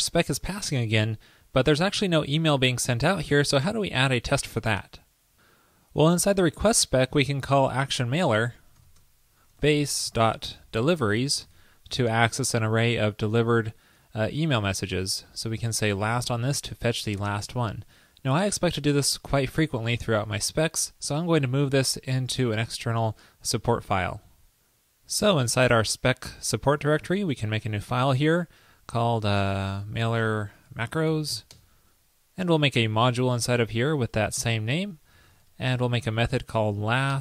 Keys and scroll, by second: 19.5 shift+super+Left.